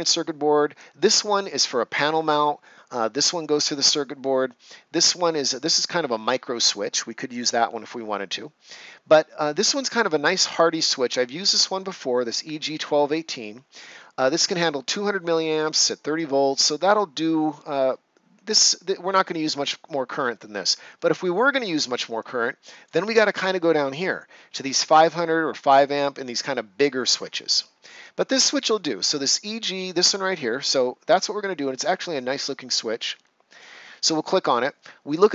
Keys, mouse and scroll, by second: 22.1-25.5 drag, 25.8 scroll down 1, 27.2 scroll up 1, 32.7 click.